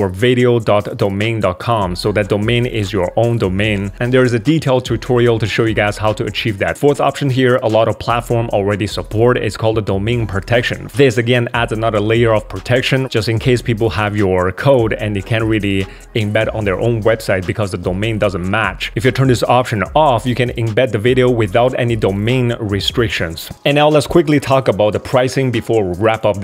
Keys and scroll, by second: 23.5 super+1.